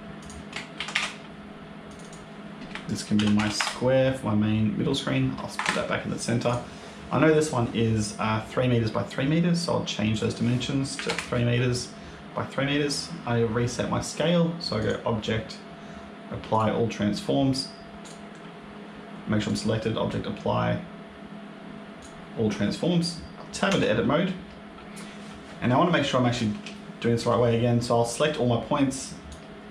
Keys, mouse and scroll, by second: 0.1 click, 0.6 ctrl+c, 0.8 ctrl+v, 1.8 click, 1.9 click, 4.8 click, 6.3 click, 10.0 click, 14.7 click, 17.9 click, 19.3 click, 23.6 Tab, 26.9 shift+middle click, 28.8 click.